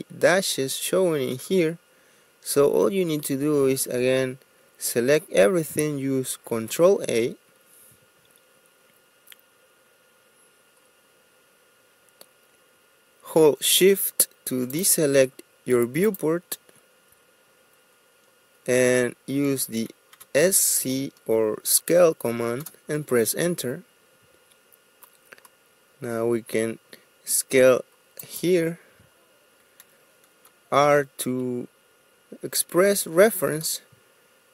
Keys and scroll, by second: 3.6 Escape, 6.3 ctrl+a, 19.4-20.1 typing, 22.6 Return, 30.4 r, 33.5 space.